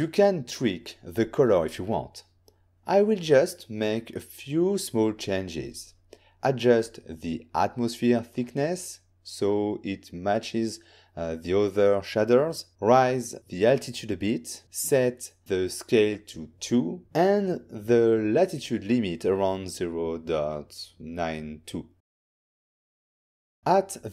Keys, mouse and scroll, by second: 1.3 shift+middle click, 2.2 scroll up 2, 2.8 click, 3.5-4.6 typing, 5.0 Return, 7.8 click, 8.9-9.4 typing, 10.0 Return, 10.6 middle click, 10.6 click, 12.0 typing, 12.9 Return, 15.6 click, 19.3 ctrl+middle click, 20.8 click.